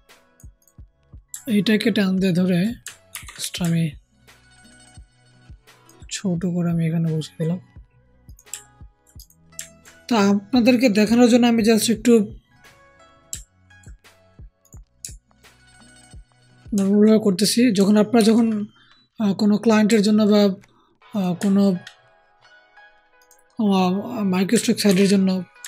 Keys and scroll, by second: 3.0 ctrl+alt+t, 3.5 ctrl+alt+t, 18.1 ctrl+t, 24.8 ctrl+t, 25.5 ctrl+alt+t.